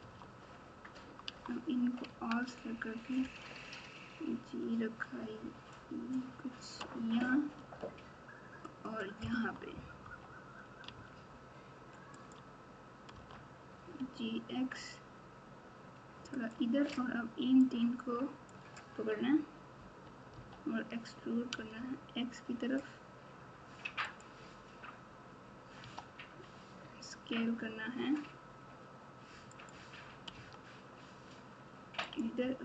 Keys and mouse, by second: 0.0 Tab, 1.2 Tab, 2.0 a, 3.2 g, 7.7 r, 9.3 Tab, 10.0 KP_1, 10.8 Tab, 12.1 click, 13.1 g, 17.6 click, 17.9 click, 20.3 e, 25.8 s, 30.3 s.